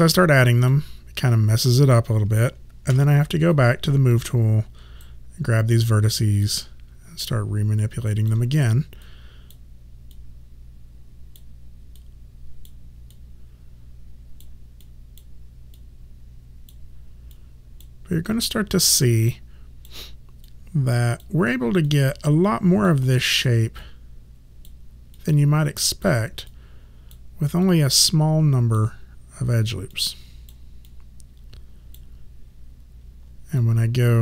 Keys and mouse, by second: 3.0 w, 3.6 right click, 5.9 click, 20.5 click, 30.0 click, 33.7 alt+click.